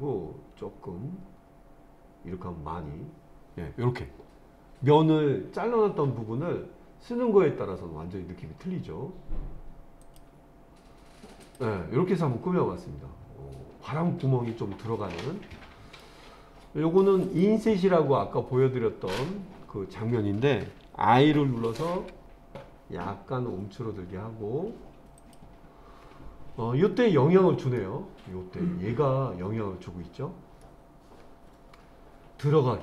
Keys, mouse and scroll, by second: 10.0 click, 11.4 click, 12.1-16.0 middle drag, 17.2 click, 22.0 i, 25.2-26.9 drag, 26.9 scroll up 1, 27.0 middle click, 30.6-32.8 middle drag.